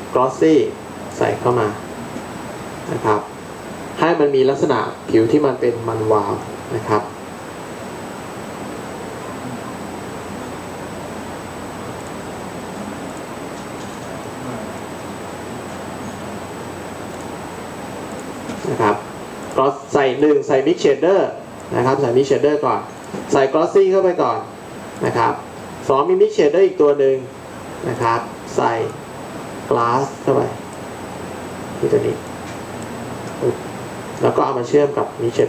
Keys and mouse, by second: 8.5 shift+a, 35.4 click.